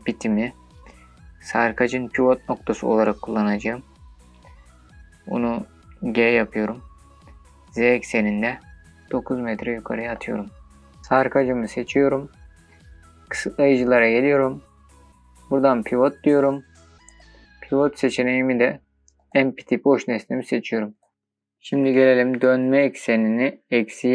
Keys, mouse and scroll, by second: 8.6 z, 9.8 KP_9, 10.3 KP_Enter, 11.5 click, 15.1-17.6 drag, 18.1-21.1 drag, 22.0-24.1 drag.